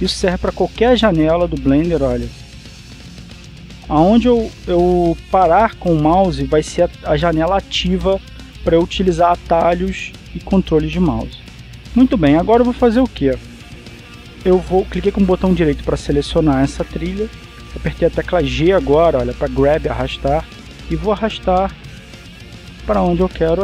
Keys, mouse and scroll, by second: 0.2-0.7 scroll up 1, 3.2-3.6 scroll up 2, 3.6-4.2 scroll down 2, 4.2-4.6 scroll up 1, 4.6-5.1 scroll down 1, 5.1 scroll up 1, 5.4-5.9 scroll down 1, 5.9-6.6 scroll up 1, 7.6-8.5 scroll down 1, 8.5-9.1 scroll up 1, 10.0-10.6 scroll down 2, 10.8-11.3 scroll up 2, 15.0 right click, 19.8 g.